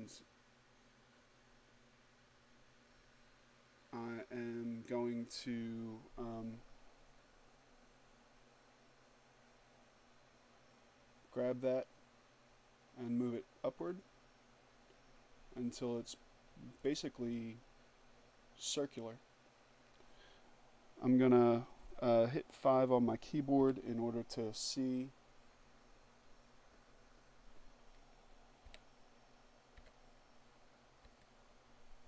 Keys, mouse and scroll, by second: 10.2-18.3 drag, 22.8 6, 27.9 6, 28.9 7, 30.3 6, 31.6 5.